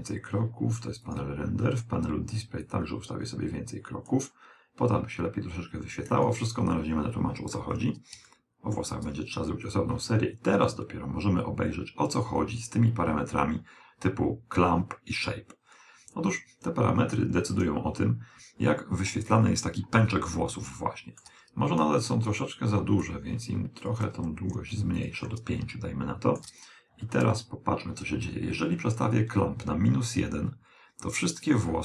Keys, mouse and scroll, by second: 1.1-4.4 drag, 6.2 click, 8.3-10.1 middle drag, 19.5-20.2 scroll up 1, 20.2-22.0 middle drag, 22.6-25.7 drag, 25.8 middle click, 29.5 click.